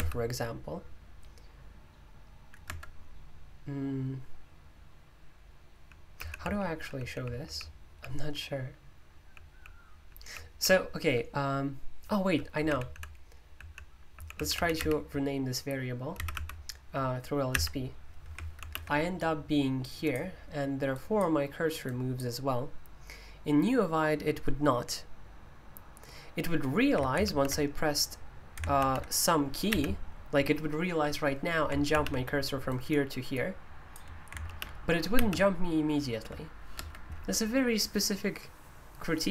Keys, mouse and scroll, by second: 2.6 Escape, 6.1-11.0 typing, 12.6-14.7 typing, 16.1 typing, 17.5 typing, 19.8-24.6 drag, 32.6-36.7 drag, 36.7 Escape.